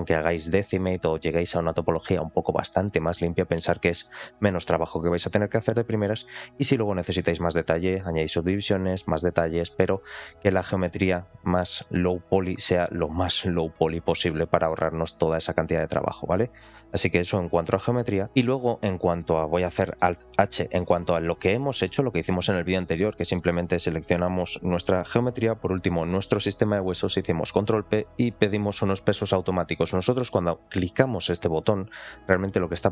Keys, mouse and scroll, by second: 10.1 click, 10.9 scroll down 2, 13.1 scroll down 4, 14.3-14.7 scroll up 2, 15.6 click, 16.4 click, 16.9 click, 18.3 click, 18.3 shift+middle click, 18.3 scroll down 3, 20.0 alt+h, 21.0 click, 24.6 click, 25.5 shift+click, 26.9 ctrl+p.